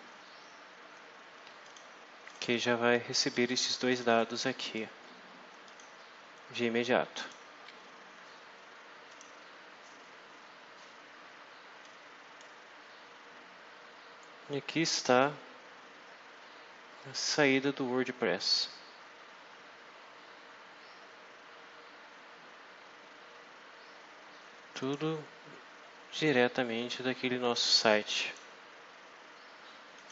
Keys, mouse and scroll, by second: 1.5 click, 2.2 click, 3.1 click, 3.8 click, 4.4 click, 5.6 click, 7.1 click, 9.0 click, 11.8 click, 24.7 click, 26.1 click, 28.2 click, 30.0 click.